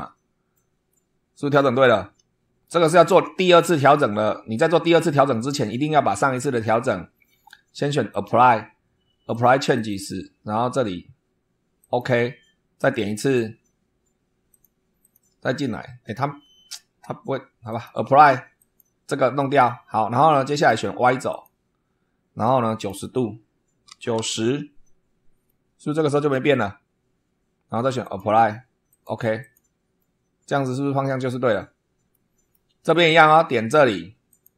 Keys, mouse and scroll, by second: 0.8 middle click, 2.6-3.2 shift+middle drag, 5.3 click, 8.0 click, 9.2 click, 9.7 click, 11.7 click, 12.7 click, 14.4 click, 14.9 click, 17.6 click, 18.5 click, 20.5 click, 21.2 click, 22.4 click, 23.8 9, 25.4-26.5 middle drag, 27.9 click, 28.8 click, 29.3 click, 29.9-30.7 middle drag, 32.0-32.6 middle drag, 34.2 click.